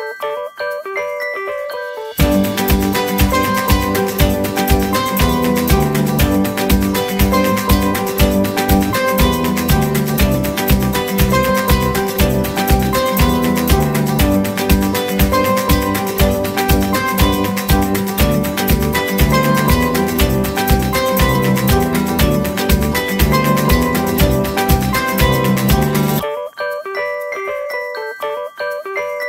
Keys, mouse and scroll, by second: 0.3 right click, 4.3-5.1 scroll down 1, 6.2 typing, 13.3-14.5 typing, 14.2 Return, 17.7 typing, 18.0 Return, 23.2-25.8 typing, 26.6 middle click.